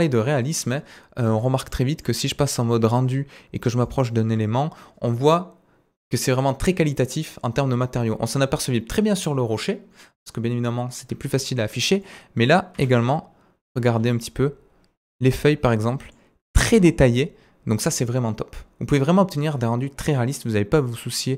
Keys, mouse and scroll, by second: 0.0-1.2 middle drag, 1.4-2.1 shift+middle drag, 2.1-2.4 scroll up 2, 2.4-13.1 middle drag, 2.7-9.9 scroll up 1, 13.1-14.1 shift+right drag, 14.0-14.7 scroll up 2, 14.7-15.4 scroll down 1, 15.3 right click, 15.7 middle click, 16.1-21.3 right drag.